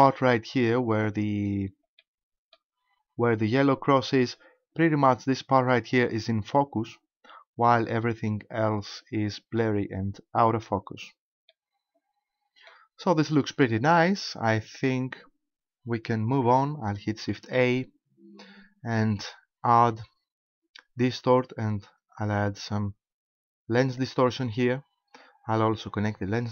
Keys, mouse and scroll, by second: 1.5-2.0 scroll down 1, 2.0 middle click, 11.5 middle click, 17.0 click, 17.4 shift+a, 25.2 click.